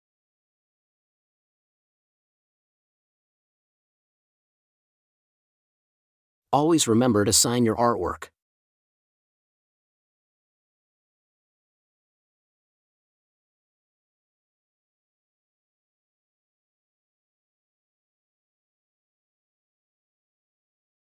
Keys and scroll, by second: 0.5 space, 2.0 super+s, 3.4 super+d, 7.8 Return, 8.5 super+u, 9.6 space, 10.4 t, 11.6 Return, 14.4 t, 19.9 super+-.